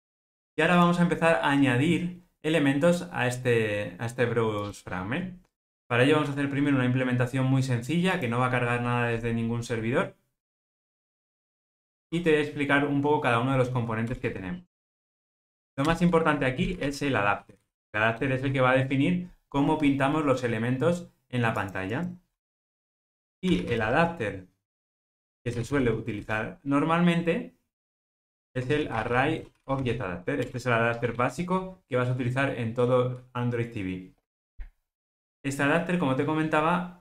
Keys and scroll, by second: 4.7 super+F8, 30.5 Return.